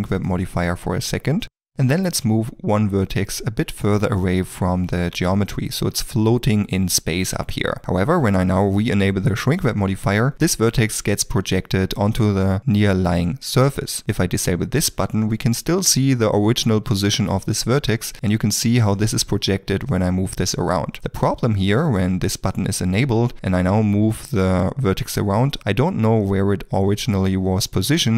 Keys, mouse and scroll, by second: 0.9 middle click, 3.7 g, 4.0 middle click, 5.2 shift+middle click, 6.3 middle click, 10.3 middle click, 17.7 g, 21.0 middle click, 22.9 ctrl+middle click, 23.4 g.